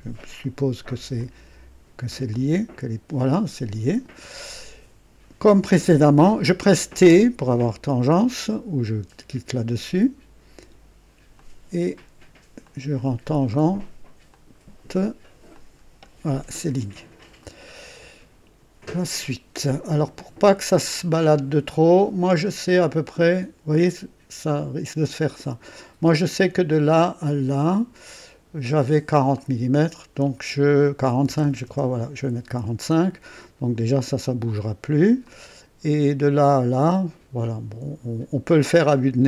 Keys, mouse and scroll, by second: 0.4 right click, 1.2 click, 2.3-4.2 drag, 7.0 t, 11.3 click, 12.6 click, 14.2 click, 15.5 click, 17.3 right click, 19.6 right click, 20.4 click, 22.2-25.9 drag, 26.0 click, 27.6 click, 29.3 click, 31.2 KP_4, 31.4 KP_5, 31.6 KP_Enter, 35.2-38.2 drag.